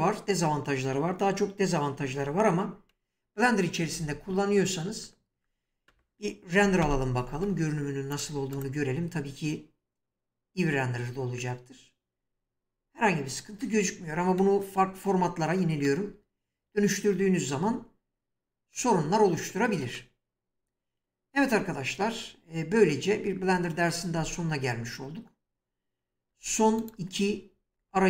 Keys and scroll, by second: 6.8 ctrl+alt+0, 13.0 Escape, 26.3 3, 27.7 Tab.